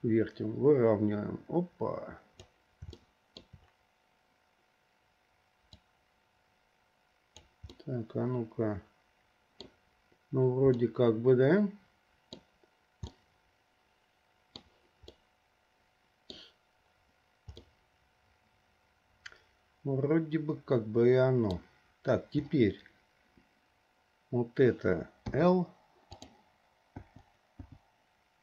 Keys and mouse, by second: 3.2 shift+middle click, 6.1-7.7 drag, 7.9-10.0 middle drag, 11.0 click, 11.2-12.3 middle drag, 12.3 click, 13.3-14.8 middle drag, 15.4-16.7 middle drag, 17.9 middle click, 18.1-21.8 drag, 18.1-21.8 right drag, 25.5 l, 26.4 click, 27.2 l, 27.9 l.